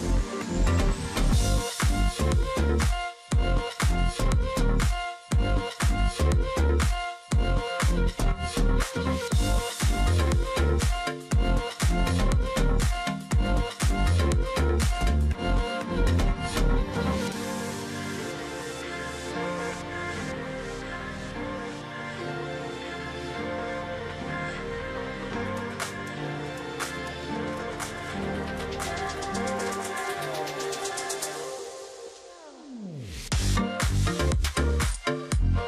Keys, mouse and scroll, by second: 0.2 space, 1.9 space, 2.4 shift+x, 3.0 ctrl+click, 4.7 ctrl+click, 6.6 ctrl+click, 7.1-7.4 alt+scroll down 1, 7.4 space, 8.5 alt+scroll down 1, 8.8-9.3 alt+scroll up 1, 9.8-10.5 alt+scroll up 1, 10.8-11.3 alt+scroll up 1, 14.0 alt+click, 14.3 space, 17.3 alt+scroll down 1, 17.5 space, 17.8-18.3 alt+scroll up 1, 18.6 space, 19.7 shift+x, 20.2 ctrl+click, 20.4 alt+scroll down 1, 20.6 space, 20.9-21.5 alt+scroll up 1, 21.8 space, 23.0 shift+x, 23.5 ctrl+click, 23.6 alt+scroll down 1, 23.8 space, 24.1-24.7 alt+scroll up 1, 24.7-25.3 alt+scroll up 1, 25.5 ctrl+z, 26.7 space, 28.0 alt+scroll down 1, 28.2 space, 30.3 space, 30.5 ctrl+click, 32.0 space, 33.6 alt+scroll down 1, 33.7 space, 34.0-34.3 alt+scroll up 1, 34.3 ctrl+click, 34.4 space.